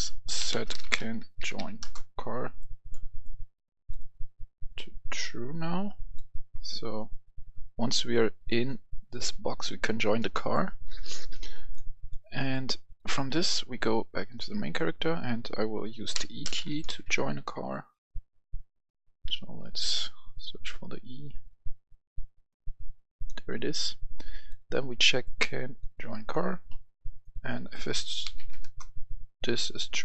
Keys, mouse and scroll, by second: 0.1-1.4 typing, 1.7 Return, 2.5-6.1 drag, 7.8 right click, 11.6 click, 14.2 right click, 16.0-16.8 typing, 17.5-17.9 scroll up 1, 19.1 scroll up 1, 23.0-25.1 drag, 26.3 click, 28.1 i, 28.3 f, 28.5 Return, 29.6-30.0 drag.